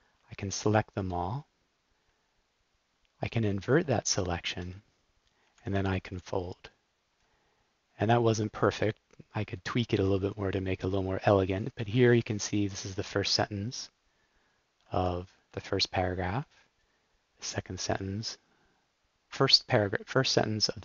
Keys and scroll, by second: 0.4 alt+Return, 3.6 shift+super+i, 5.4 super+k, 6.1 f, 14.9 super+l, 18.0 super+l.